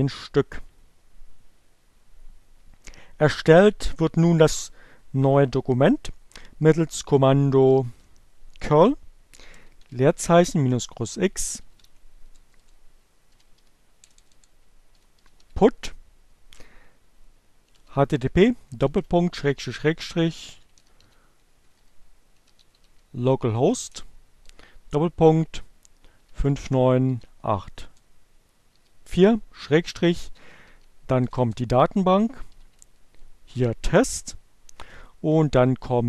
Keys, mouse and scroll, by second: 7.0-8.1 typing, 9.8-13.5 typing, 14.7-15.5 typing, 17.2-23.3 typing, 25.0-26.1 typing, 27.2-28.9 typing, 30.3 shift+t, 30.6 shift+s, 31.5 shift+t.